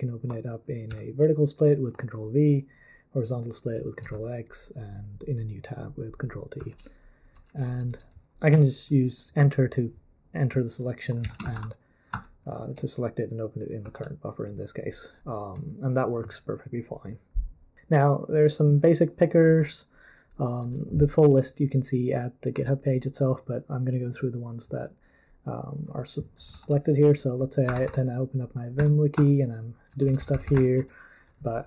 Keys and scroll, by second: 0.9 ctrl+v, 4.1 super+l, 6.6 super+l, 7.3 j, 7.6 j, 7.8 j, 8.0 j, 11.2-12.0 typing, 12.1 Return, 13.8 super+l, 15.3 j, 20.6 j, 26.5 super+l, 27.4-28.8 typing, 29.2 Return, 29.8-31.0 typing.